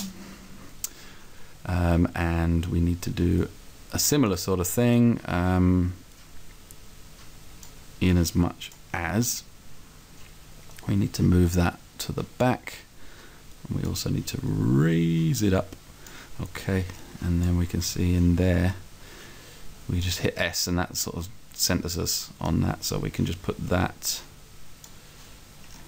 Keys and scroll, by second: 0.0 Return, 17.9 s.